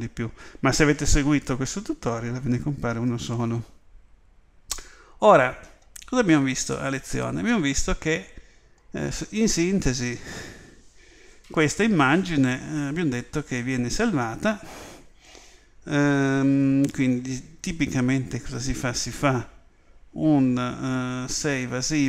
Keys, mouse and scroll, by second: 3.7-6.7 scroll down 1, 6.7-8.7 middle drag, 17.0 click.